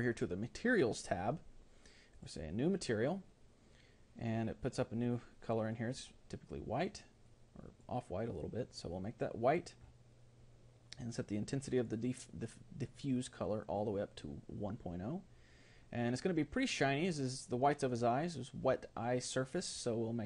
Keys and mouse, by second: 2.2-7.7 drag, 9.1-11.1 drag, 11.4-16.6 drag.